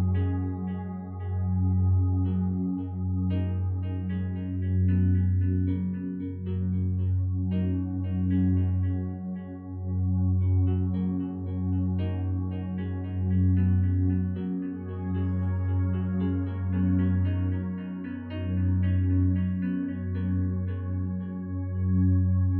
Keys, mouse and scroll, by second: 4.5 2, 4.7 Return.